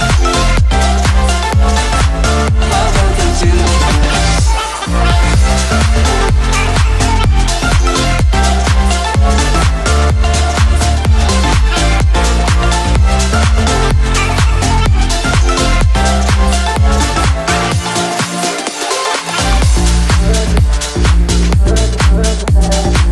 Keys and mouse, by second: 1.8 click, 4.1-4.6 space, 5.1-5.8 click, 5.8 space, 6.0 click, 6.2 space, 6.5 right click, 7.4 click, 8.4 ctrl+-, 8.6 space, 8.8-9.2 click, 9.0 space, 9.4-10.0 drag, 12.2 right click, 12.7-15.8 drag, 17.5 right click, 18.1 click, 20.8-23.1 drag.